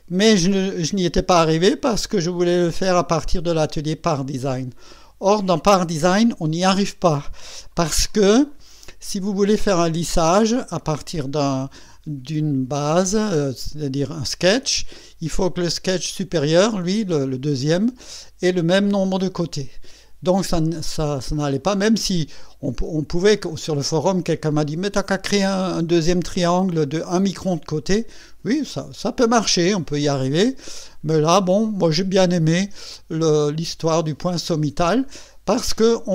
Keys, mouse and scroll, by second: 8.5 right click, 9.4 click, 10.0 click, 13.2 click, 13.5 space.